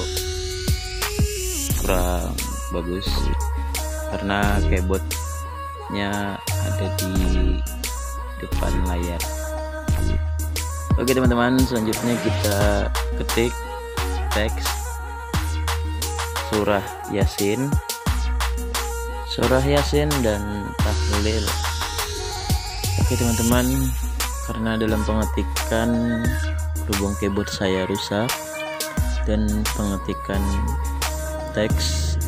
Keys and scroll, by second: 0.1-0.9 typing, 4.7 q, 5.1 s, 9.1-18.2 typing, 23.9 ,, 24.0 ;, 25.1 Return, 28.0-32.2 typing.